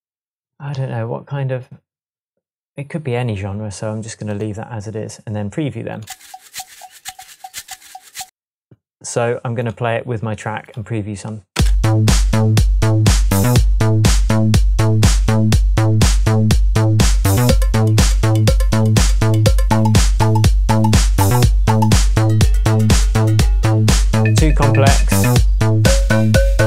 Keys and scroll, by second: 11.6 space.